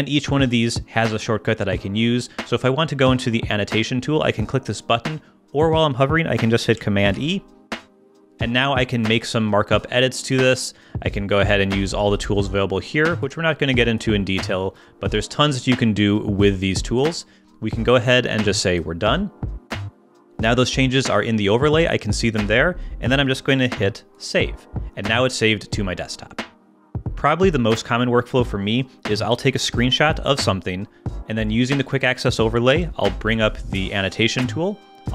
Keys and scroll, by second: 7.1 super+e, 29.6 shift+super+3, 32.7 super+e.